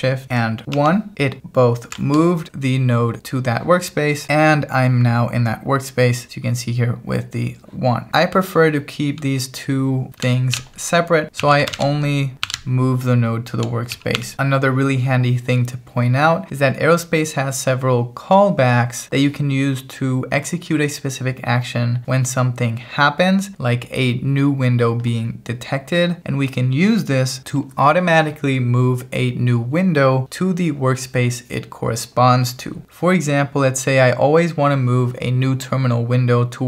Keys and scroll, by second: 0.8 alt+shift+1, 8.6 h, 9.2 h, 10.6-14.7 typing.